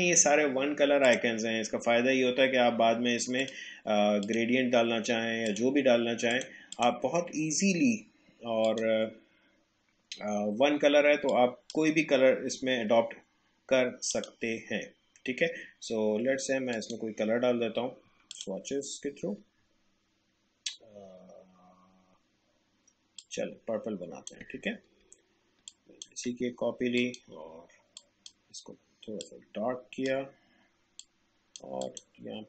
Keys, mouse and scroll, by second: 3.4 click, 11.3-14.1 drag, 16.7 click, 23.1-25.7 drag, 25.7-32.4 alt+drag.